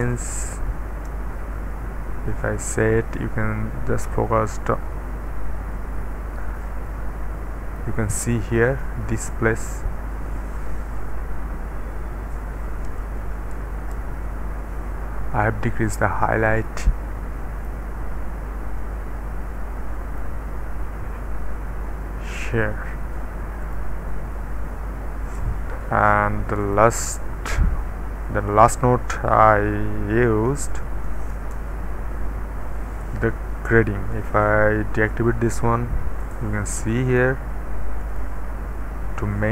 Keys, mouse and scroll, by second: 0.0 KP_1, 0.8 Return, 2.7-3.8 middle drag, 3.4-4.3 scroll up 1, 12.8 KP_Decimal, 13.2 KP_8, 13.6 Return, 16.0-17.0 scroll down 1, 16.4 middle click, 17.7 middle click, 18.4-20.2 scroll down 1, 23.6 click, 26.6 click, 31.3 Return, 34.1 click, 35.3 d, 36.3-36.8 scroll down 1, 36.8-37.8 middle drag, 38.0 click, 38.5 d, 38.7 click.